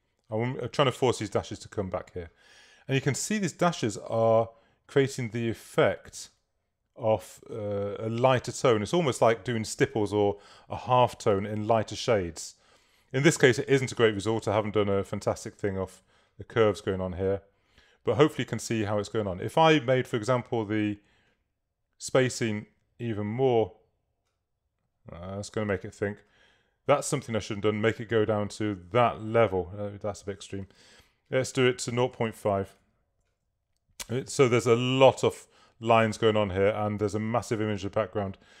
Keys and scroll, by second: 11.4 super+-, 30.9 super+a, 32.3 5, 32.6 Tab.